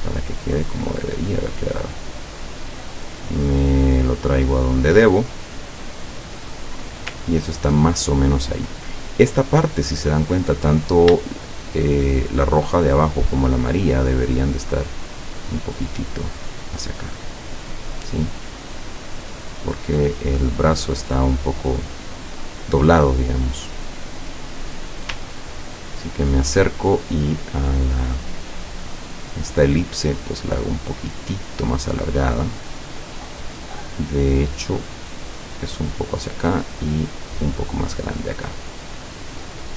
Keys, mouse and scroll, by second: 1.6 click, 2.3-5.7 drag, 6.3 click, 10.3 click, 11.3 shift+click, 11.8 shift+click, 13.8 click, 15.3-17.0 drag, 17.2-20.3 drag, 25.4-26.0 ctrl+scroll up 2, 27.3-28.6 drag, 29.9-31.4 drag, 31.9 click, 33.4-36.3 drag, 36.7 click, 39.0 click.